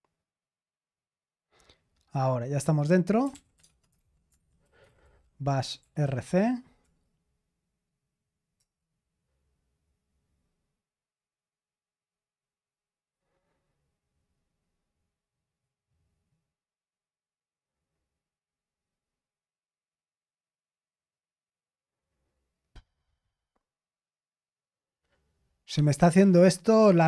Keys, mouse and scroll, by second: 3.0-6.5 typing, 6.8 Return, 8.5 Return, 9.1 typing.